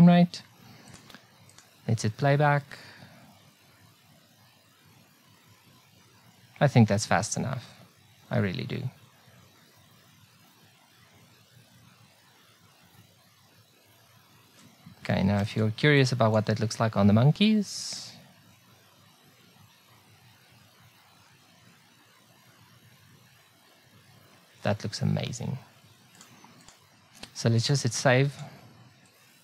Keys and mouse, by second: 0.9 middle click, 1.5-3.3 drag, 15.3 ctrl+b, 26.1 click.